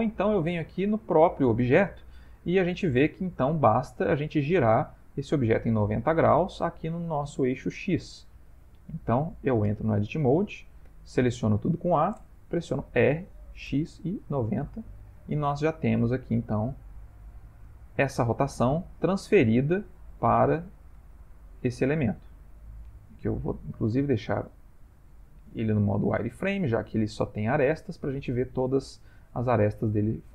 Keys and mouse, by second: 0.5 click, 2.3 middle click, 6.2 middle click, 7.5 middle click, 8.4 middle click, 9.7 Tab, 10.8 a, 12.8 r, 16.0 middle click, 16.1 middle click, 16.4 middle click, 16.5 middle click, 17.2-17.6 ctrl+middle click, 17.9 Tab, 19.0 middle click, 20.4 click, 21.2 shift+middle click, 21.6 shift+middle click, 22.3 middle click, 23.8 click, 24.7 middle click, 27.5 middle click, 28.8 click, 29.6 middle click, 30.0 middle click.